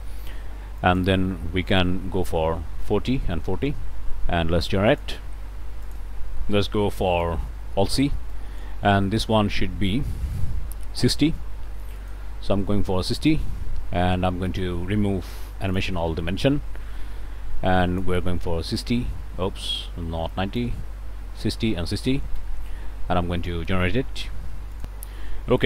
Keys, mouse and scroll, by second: 0.8 click, 1.7 ctrl+click, 2.0 ctrl+a, 2.6 ctrl+4, 2.9-3.8 typing, 4.9 click, 5.9 click, 6.5-6.8 scroll up 2, 7.1 click, 7.9 alt+c, 8.3 alt+click, 10.2 click, 12.0 click, 12.6-13.4 typing, 14.5 click, 15.7 click, 17.8 click, 18.6 9, 18.9 Tab, 20.3 click, 21.2 6, 21.4 Tab, 21.7 6, 22.3 Return, 23.0 space, 23.4 click, 24.8 click.